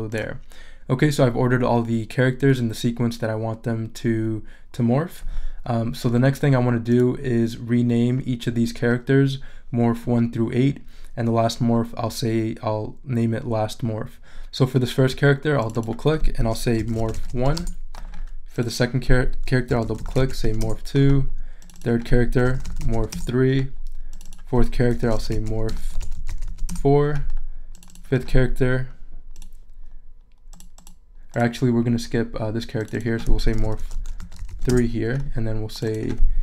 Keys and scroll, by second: 16.5-18.0 typing, 19.4-20.9 typing, 22.2-23.4 typing, 24.7-26.6 typing, 33.4-35.0 typing, 36.3-36.4 typing.